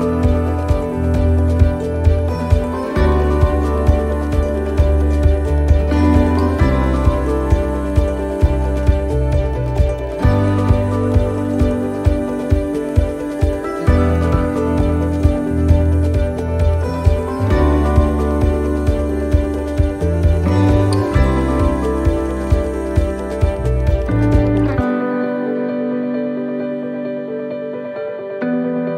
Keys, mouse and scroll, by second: 0.3 scroll down 1, 2.7 click, 3.7 click, 5.6 click, 7.0 right click, 8.0-11.9 typing, 14.0 a, 15.2 click, 18.2 s, 21.9 middle click, 22.1-22.6 scroll down 4, 22.8 middle click, 23.2 scroll down 1, 23.8-24.1 scroll down 1, 24.7 click, 26.9 click, 28.2 shift+middle click, 28.7 scroll up 1.